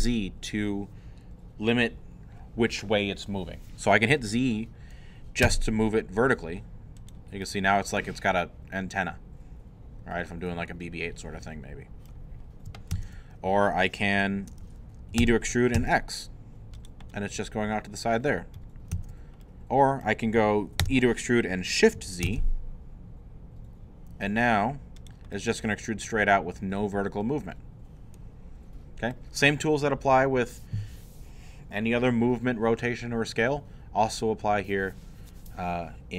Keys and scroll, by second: 5.4 z, 12.9 ctrl+z, 15.2 e, 15.8 x, 18.9 ctrl+z, 20.8 e, 22.2 shift+z.